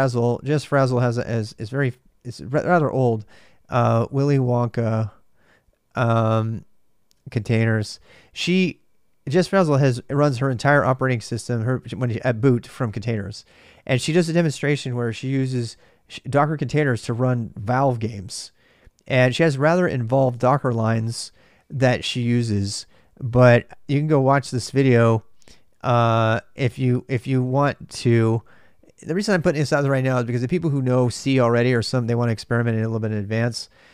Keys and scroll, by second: 0.0-5.6 typing, 6.9-8.2 typing, 23.0-25.6 j, 25.6 Return, 27.0 ,.